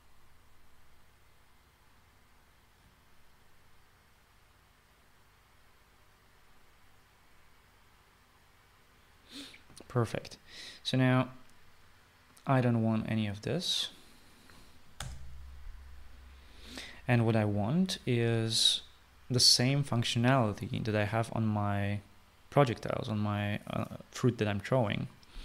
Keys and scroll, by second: 16.0 BackSpace.